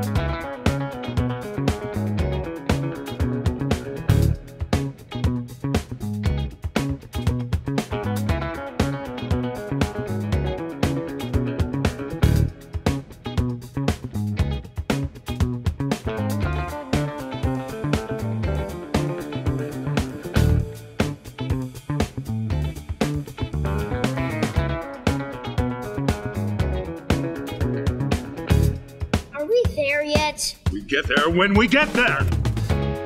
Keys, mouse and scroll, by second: 1.9 click, 4.3-5.6 drag, 8.1-12.8 drag, 15.2 click, 15.7 click, 17.5 click, 17.7-22.3 drag, 22.5 click, 22.8-27.3 drag, 30.5 ctrl+i, 32.7 click.